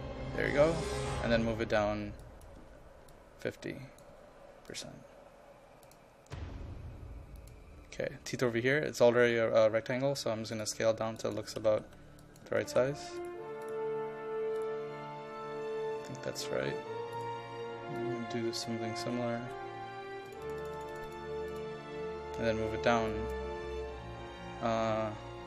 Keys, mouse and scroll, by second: 2.7 KP_0, 3.2 click, 4.2 KP_5, 4.8 click, 11.4-12.9 typing, 12.3 click, 13.3 click, 18.8 KP_1, 20.3 click, 23.7 KP_0.